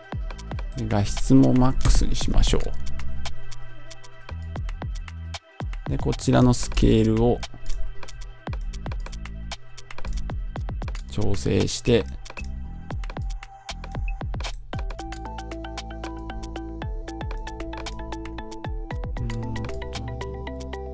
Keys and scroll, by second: 1.7 Home.